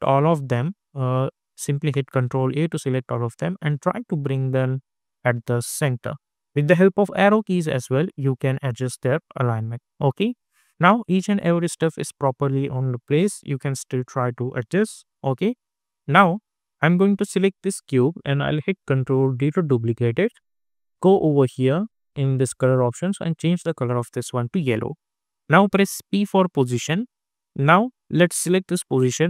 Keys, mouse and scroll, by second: 1.4 click, 1.9 ctrl+a, 3.2-6.9 drag, 6.9 Down, 7.8 Left, 9.6 click, 12.1 click, 13.2 Down, 14.9 Left, 16.1 click, 19.3 ctrl+d, 21.2 click, 26.1 p, 28.5 click.